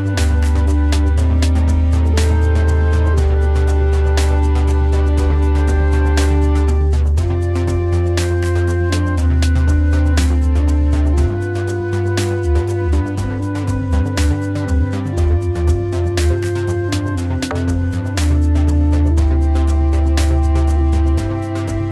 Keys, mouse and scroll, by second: 10.7 alt+click.